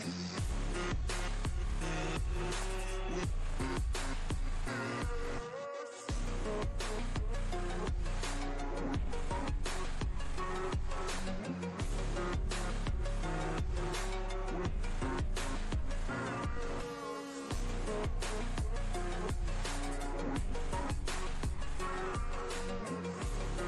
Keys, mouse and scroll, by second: 5.8 ctrl+d, 7.6 space, 7.8 click, 8.0 space, 8.3 space, 8.8-9.8 drag, 12.1 space, 12.3 click, 12.5-13.5 space, 15.2-16.1 drag, 16.7 space, 18.8 click, 22.2 space, 22.3-23.0 click, 22.6 space.